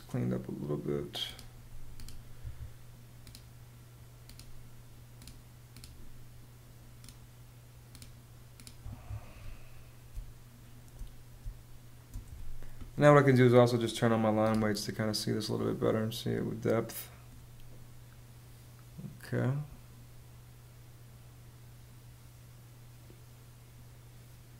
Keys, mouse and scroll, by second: 1.9 ⟲, 2.5 Home, 8.3 Home, 9.6 space, 10.9 space.